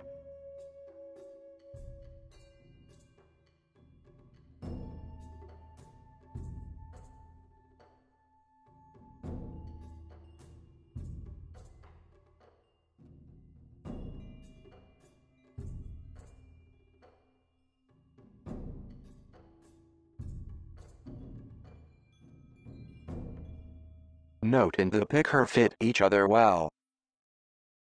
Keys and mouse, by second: 0.1-1.2 middle drag, 1.6 g, 3.4-6.2 middle drag, 7.5-8.6 middle drag, 9.4 g, 11.0 click, 11.6 g, 12.5-13.0 middle drag, 13.1 KP_1, 13.8-17.0 middle drag, 17.6 KP_1, 18.1 g, 21.9 click, 22.8 g.